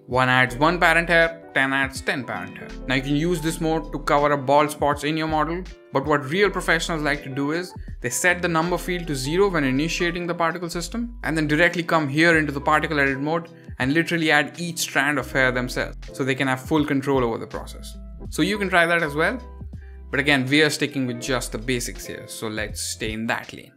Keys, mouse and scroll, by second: 1.4 click, 1.7 click, 3.9 click, 5.1 drag, 8.3-9.7 drag, 10.7-11.5 drag, 12.8 click, 13.6 drag, 14.0 middle drag, 14.4 drag, 14.8 drag, 15.1 drag, 15.5 drag, 15.8 drag, 16.2 drag, 16.5 drag, 16.8 drag, 17.2 drag, 17.5 drag, 17.8 click, 18.8-19.9 drag, 20.4 click, 22.0 f, 22.6 drag.